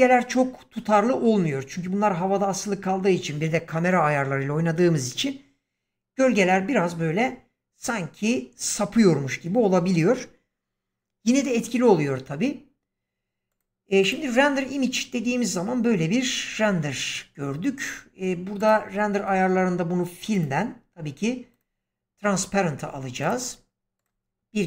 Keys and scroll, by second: 16.5 Escape.